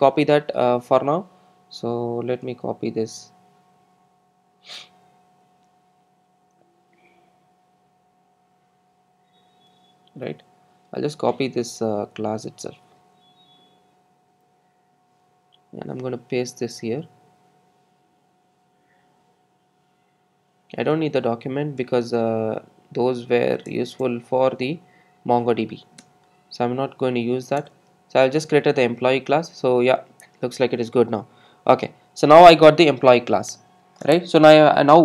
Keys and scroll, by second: 10.3 super+a, 13.6 super+c, 14.2 super+c, 27.6 super+e.